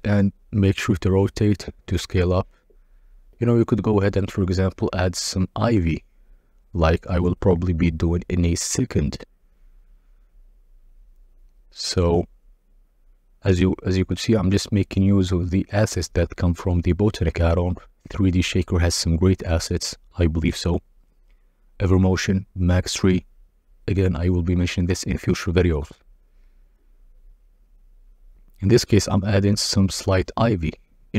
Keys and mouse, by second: 1.2 middle click, 7.1 click, 11.4-13.3 drag, 14.6 click, 18.4 g, 18.7 shift+z, 26.3 click, 28.9-29.6 drag, 30.2-31.1 typing.